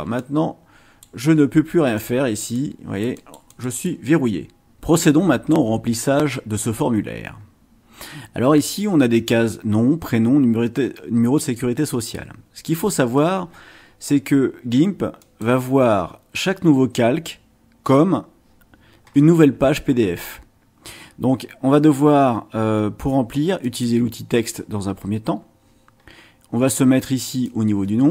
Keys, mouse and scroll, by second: 0.2-1.2 drag, 1.9 click, 2.5-4.0 drag, 15.2 click, 23.6 click, 27.4-28.1 drag.